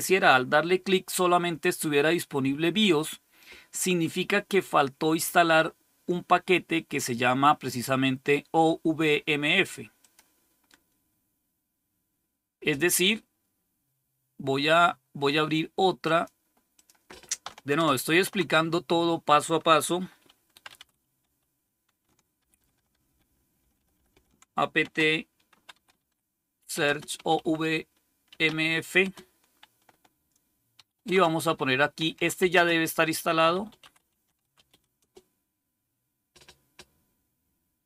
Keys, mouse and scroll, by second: 0.3 click, 9.9 click, 10.6 click, 17.6 super+Return, 20.3-21.6 typing, 22.3 ctrl++, 22.5 ctrl++, 22.6 ctrl++, 22.8 ctrl++, 22.9 ctrl++, 23.5 ctrl++, 23.7 ctrl++, 24.0 ctrl++, 24.7-28.9 typing, 30.6-35.4 typing.